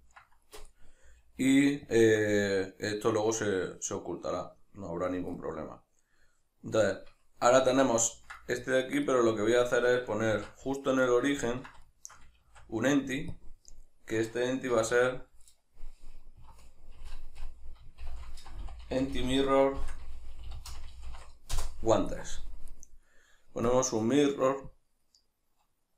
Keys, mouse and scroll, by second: 1.0 g, 2.0 shift+click, 5.3-9.1 middle drag, 7.6 alt+q, 9.1 right click, 10.3 shift+c, 11.1-19.0 ctrl+middle drag, 12.4 shift+a, 14.7 F2, 17.0 BackSpace, 19.0 r, 22.7 right click, 23.7-25.9 drag.